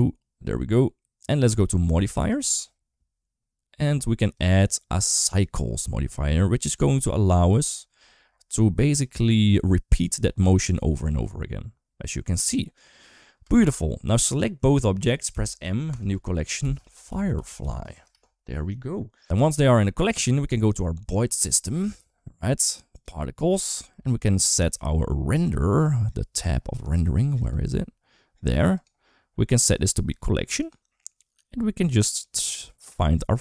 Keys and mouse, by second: 2.1 click, 4.0-5.2 drag, 6.5 click, 9.0 middle click, 10.9 space, 13.2 space, 14.2-14.6 drag, 15.1 m, 17.9 Return, 19.8 middle click, 20.4 shift+middle click, 22.7 click, 27.3 click, 28.6 click, 29.4-30.5 drag, 32.0-33.3 drag.